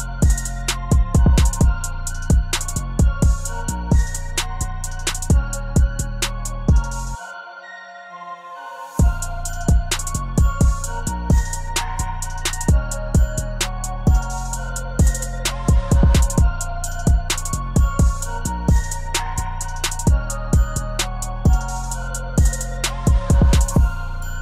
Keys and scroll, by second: 12.4 ctrl+c, 16.6 ctrl+v, 18.1 ctrl+t.